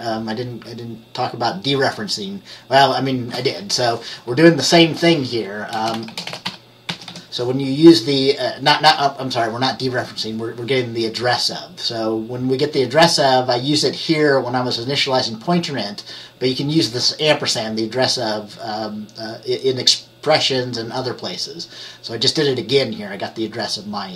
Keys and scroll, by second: 5.8-7.7 typing.